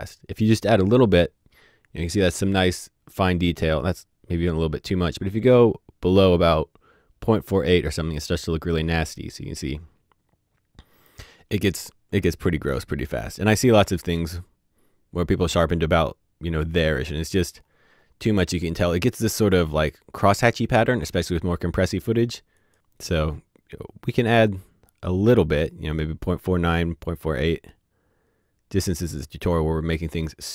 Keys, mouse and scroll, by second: 0.2 scroll down 1, 1.6-2.2 scroll down 1, 2.2-5.2 scroll up 1, 5.4 click, 17.9-20.3 scroll down 1, 21.7 click, 26.1 click.